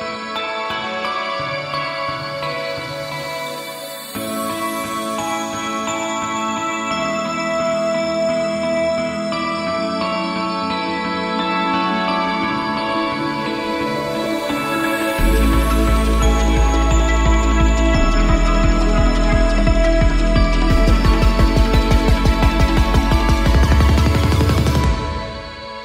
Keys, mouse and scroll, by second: 1.3 space, 2.1 u, 3.2 t, 3.4 middle click, 3.8 click, 4.1 a, 4.2 a, 4.4 u, 5.5 a, 5.7 middle drag, 5.8 drag, 5.8 s, 6.6-7.0 right drag, 6.9-8.2 typing, 8.5 click, 8.9 ctrl+l, 9.2 click, 9.3-16.4 typing, 11.6-11.9 drag, 12.9 click, 14.5 right drag, 15.2 right click, 15.4 ctrl+l, 17.3 click, 18.8-19.9 drag, 19.9-20.6 drag, 20.7-22.1 drag, 23.8 click, 24.6 BackSpace, 25.2 click.